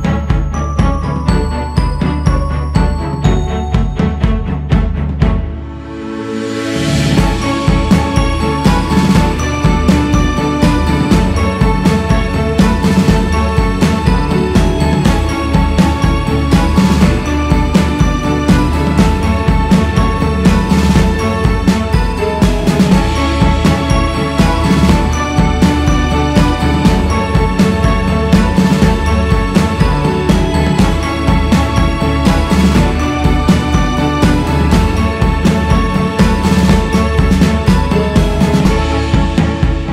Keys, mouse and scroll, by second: 3.6 click, 4.8 click, 10.7-13.8 drag, 20.7-23.0 drag, 23.0-23.7 scroll down 3, 23.8 click, 24.6 scroll up 2, 24.8 scroll down 5, 25.5-26.4 scroll up 2, 26.4 shift+s, 27.2 f, 28.1-31.3 drag, 31.3-31.7 scroll down 4, 32.1-32.6 scroll down 3, 32.6 click, 33.4-34.2 scroll up 3, 34.2 scroll up 3, 34.8-39.9 drag.